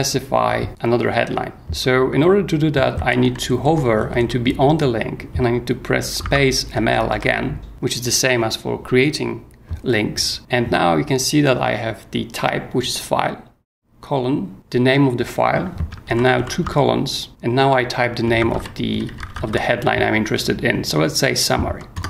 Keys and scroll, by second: 0.7 ctrl+g, 2.7-4.5 typing, 6.2 space, 6.6 m, 7.1 l, 16.1 shift+;, 18.1-19.9 typing, 21.9 Return.